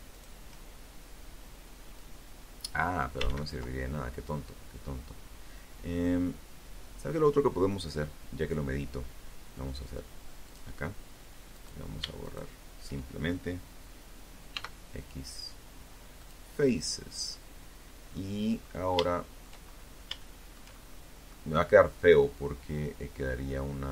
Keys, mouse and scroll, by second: 0.1-1.5 drag, 1.4 ctrl+z, 5.9 scroll down 2, 6.7-7.0 scroll up 2, 8.6 click, 9.7 right click, 10.4 shift+right click, 12.7 x, 14.3 click, 15.7-16.3 scroll down 2, 16.3 right click, 17.2 shift+middle click, 17.9 shift+scroll up 2, 18.3-19.7 shift+middle drag, 20.3 scroll up 2.